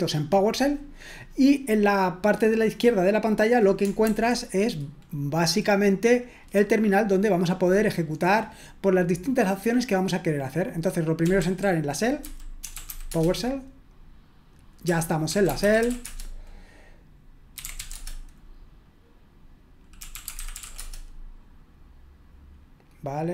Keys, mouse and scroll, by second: 4.0 super+h, 11.2-13.4 typing, 15.8 typing, 16.0 Return, 17.5-18.2 typing, 20.5 typing.